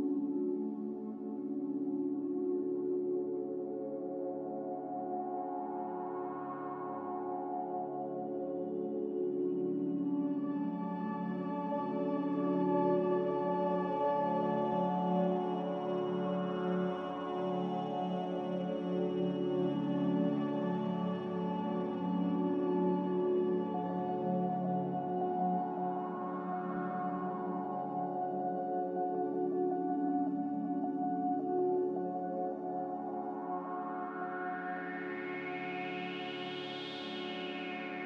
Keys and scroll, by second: 0.2 z, 1.8-2.6 typing, 2.7 Return, 4.8-5.5 typing, 7.7-8.4 typing, 8.7 Return, 11.8 5, 35.5 a.